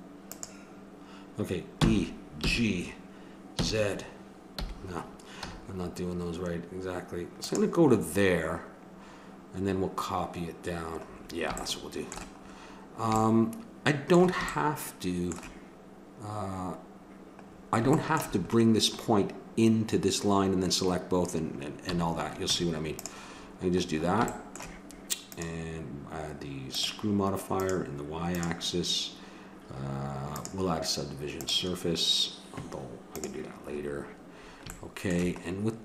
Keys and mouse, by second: 1.8 e, 11.2-13.9 middle drag, 21.9 a, 22.5 Tab.